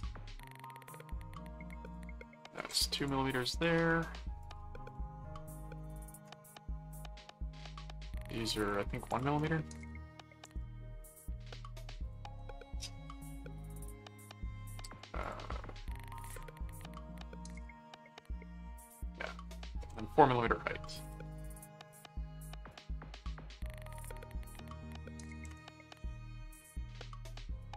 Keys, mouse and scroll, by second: 0.9 click, 1.8 click, 2.6 ctrl+Tab, 2.9 ctrl+click, 3.6 right click, 4.4 click, 8.6 click, 12.0 ctrl+click, 12.3 ctrl+Tab, 14.9 click, 16.2 ctrl+4, 19.8 ctrl+Tab, 20.8 right click, 21.8 click, 22.7 click, 24.2 click, 27.5 middle click.